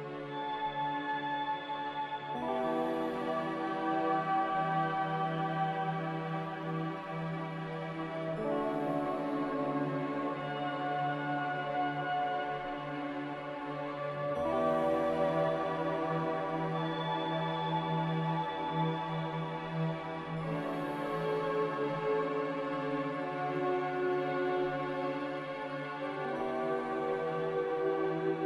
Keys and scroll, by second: 0.7 5, 0.9 Return, 1.7 n, 2.5 m, 4.0 Escape, 7.6 Escape, 15.2 x, 16.3 typing, 16.7 Return, 18.7-21.4 typing, 22.5-23.5 typing.